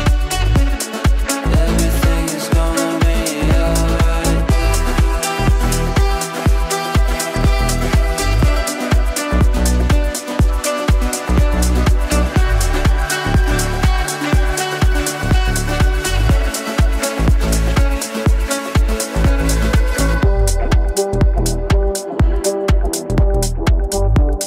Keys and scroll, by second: 0.0 ctrl+z, 23.6 g.